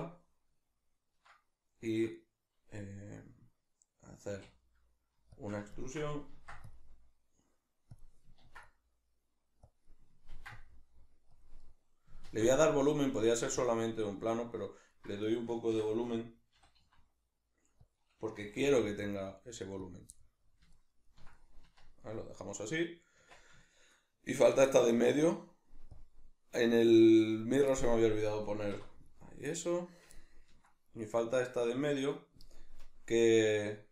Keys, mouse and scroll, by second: 4.4 e, 5.4 shift+click, 5.7 ctrl+middle click, 6.4 ctrl+r, 8.0 click, 8.4 ctrl+r, 8.4-9.8 middle drag, 9.8 click, 9.8-11.4 middle drag, 10.3 ctrl+r, 11.4 click, 11.6-13.7 middle drag, 12.2 ctrl+r, 13.7 click, 13.8-15.2 middle drag, 15.2 right click, 15.7 l, 18.0 click, 18.4 g, 20.0 click, 20.1-26.0 middle drag, 21.6 Tab, 23.2 Tab, 26.0 click, 27.7-29.0 shift+middle drag, 28.8 3, 29.0 right click, 31.8 right click.